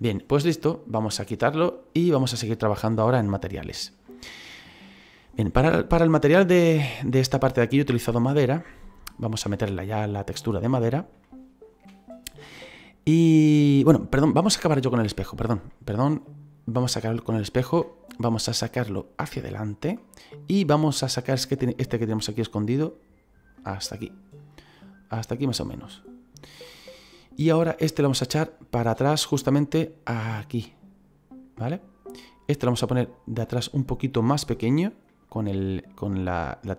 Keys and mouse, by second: 0.6 click, 2.6 middle click, 3.2 shift+middle click, 4.9 shift+middle click, 7.8 right click, 9.6 shift+middle click, 11.2 shift+middle click, 14.6 middle click, 15.3 right click, 15.6 middle click, 17.1 middle click, 18.9 click, 20.1 shift+middle click, 21.4 right click, 22.4 click, 23.7 middle click, 24.6 click, 27.4 right click, 28.1 click, 32.4 right click, 35.0 middle click.